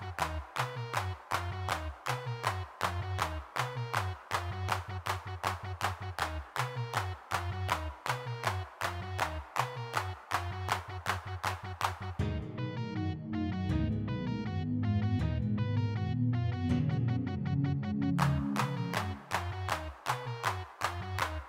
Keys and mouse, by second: 0.8 3, 2.0-4.6 middle drag, 5.5 middle click, 9.5-10.7 middle drag, 10.7 click, 11.3 click, 12.4-15.4 drag, 15.4-16.5 middle drag, 18.2 middle click, 19.3 middle click, 19.5 click, 20.0 shift+c, 21.0-21.4 drag.